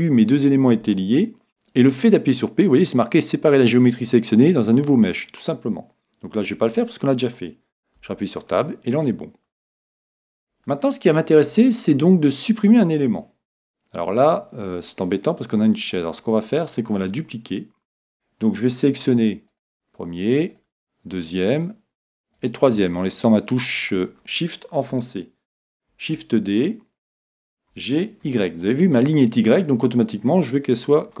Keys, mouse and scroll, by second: 8.0 Tab, 8.6-10.1 middle drag, 10.4 right click, 13.6-18.7 middle drag, 16.0-17.0 scroll up 1, 17.0-17.6 scroll up 1, 17.6 scroll up 1, 17.8-18.4 scroll down 1, 18.4-18.7 scroll down 1, 19.5-22.3 right drag, 23.0-24.9 middle drag, 25.9 shift+d, 30.8-31.2 drag.